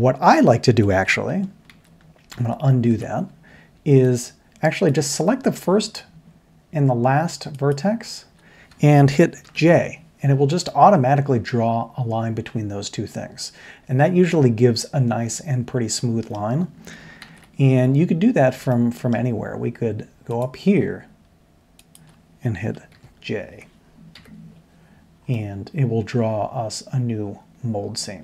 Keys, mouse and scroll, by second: 1.7 ctrl+z, 2.5 ctrl+z, 7.7 shift+click, 9.4 j, 10.6-11.1 middle drag, 17.2 ctrl+z, 18.7 middle click, 22.9 ctrl+j, 24.2 j.